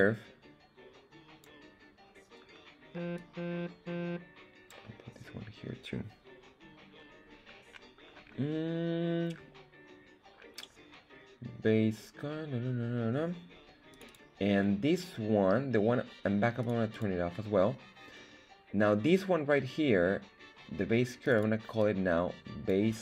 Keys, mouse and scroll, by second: 3.1-4.7 drag, 13.8 click, 14.0-16.6 drag, 16.9 click, 21.2 click, 21.3-23.0 drag.